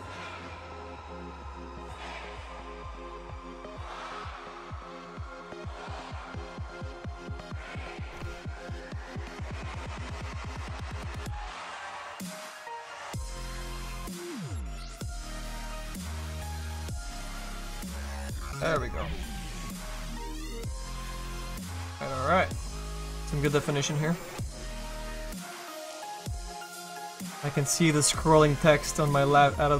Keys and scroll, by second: 10.9 s, 15.0 s, 27.7 s.